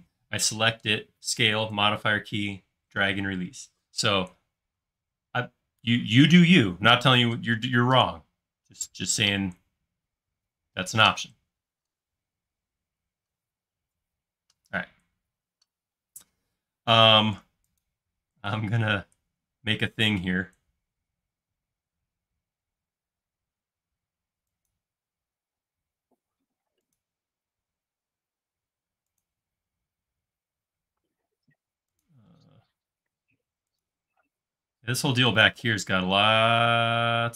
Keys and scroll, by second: 16.0 l, 25.6 l, 32.4 i.